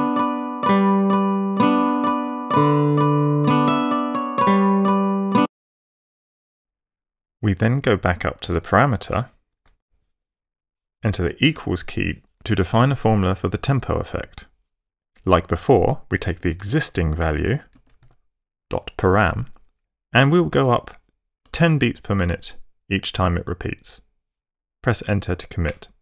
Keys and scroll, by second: 5.4 space, 9.0 Page_Up, 11.5 =, 16.3-18.2 typing, 19.8-22.1 typing, 25.7 Return.